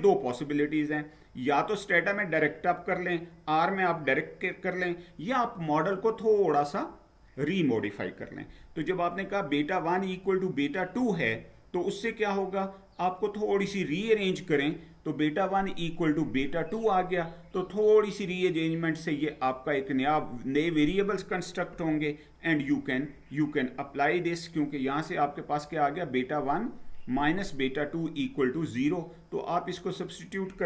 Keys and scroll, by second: 10.9 Down, 13.6 Down.